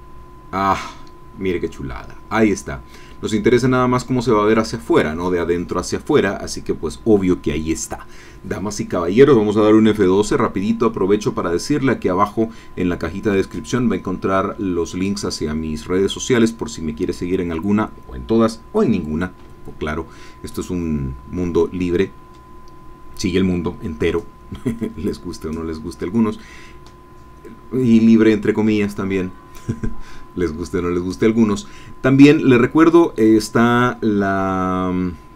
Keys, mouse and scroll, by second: 3.1 scroll up 2, 9.9 F12.